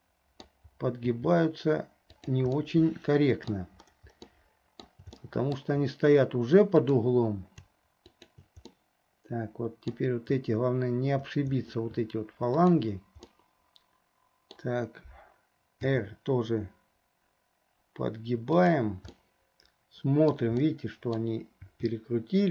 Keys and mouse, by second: 2.8 click, 2.8 right click, 4.4 click, 5.4 shift+click, 6.8 click, 8.1 shift+click, 8.8-10.1 middle drag, 13.5-14.8 middle drag, 16.0 r, 19.4-20.5 middle drag, 20.8 middle click.